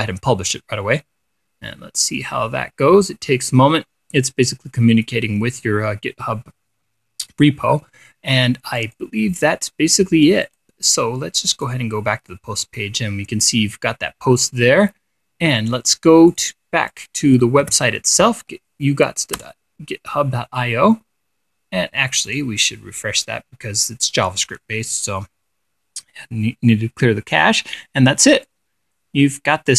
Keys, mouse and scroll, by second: 0.0 click, 9.3 click, 10.9 click, 12.1 click, 16.8 click, 17.4 click, 18.1 ctrl+v, 19.9 Return, 22.8 click, 29.0-29.7 drag.